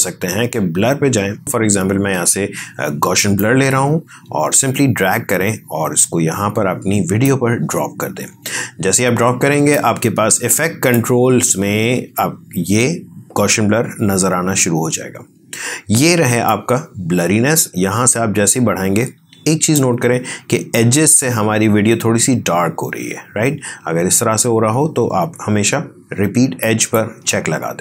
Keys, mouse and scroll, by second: 3.3-9.6 drag, 9.6 click.